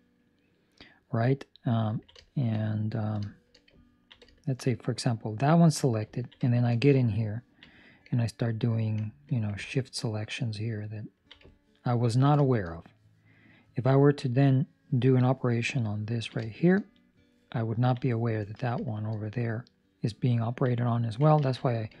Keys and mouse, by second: 1.9 ctrl+middle click, 2.1 shift+middle click, 3.4 ctrl+middle click, 3.7 ctrl+middle click, 4.2 middle click, 4.9 middle click, 6.0 ctrl+middle click, 6.6 shift+middle click, 6.8 shift+middle click, 7.2 ctrl+middle click, 9.7-11.2 ctrl+right click, 11.4 ctrl+middle click, 12.3 shift+middle click, 12.7 middle click, 13.9 ctrl+middle click, 16.7 shift+middle click, 16.9 shift+middle click, 17.6 ctrl+middle click, 18.7 shift+middle click, 20.3 ctrl+middle click, 21.3 alt+a.